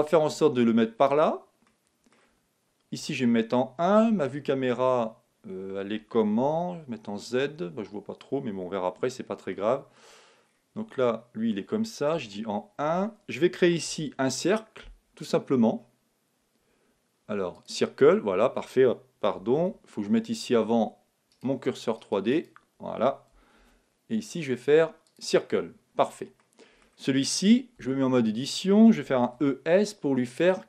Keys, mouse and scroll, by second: 1.6-3.0 middle drag, 3.0 KP_1, 3.2 middle click, 4.1 KP_0, 6.4 z, 9.5-13.4 middle drag, 12.1 KP_1, 13.8 shift+a, 19.5 super+z, 21.3-23.6 right drag, 22.3-23.9 drag, 23.6 shift+a, 26.4-28.2 middle drag, 27.7 Tab, 29.0 e, 30.5-30.6 drag.